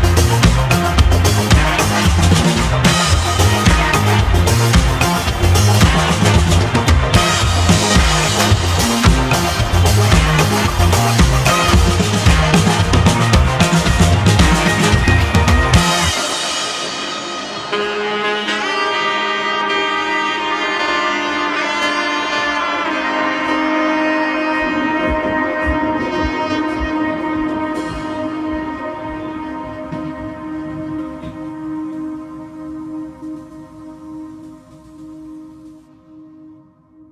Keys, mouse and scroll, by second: 0.4-2.0 shift+middle drag, 2.0 s, 6.1-6.6 scroll down 1, 6.6-7.2 shift+middle drag, 7.2-7.7 scroll up 3, 7.7-8.4 shift+middle drag, 8.4 s, 12.9-14.7 shift+middle drag, 14.7 s, 19.5 scroll down 1, 20.0-20.5 scroll down 1, 20.5 shift+middle click, 21.3 g, 27.2-29.7 middle drag, 29.7 `, 31.4 g.